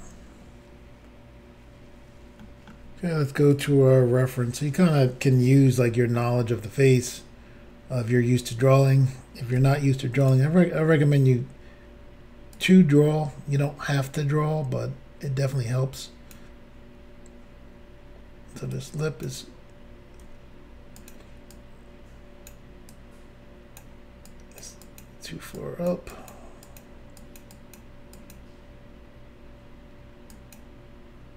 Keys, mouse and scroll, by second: 2.4 middle click, 3.5 click, 3.6 click, 4.1 scroll up 1, 4.9 scroll up 1, 5.7 shift+middle click, 7.0-7.4 scroll up 1, 9.6 f, 10.2 click, 12.5 click, 12.6 click, 14.0 click, 18.7 click, 20.2 f, 21.0 click, 21.1 click, 21.5 click, 22.9 click, 24.3 click, 24.8 click, 25.0 click, 25.6 click, 26.1 click, 26.3 click, 26.6 click, 26.8 double click, 27.2 click, 27.4 click, 27.5 double click, 28.2 double click, 28.3 click, 30.3 click.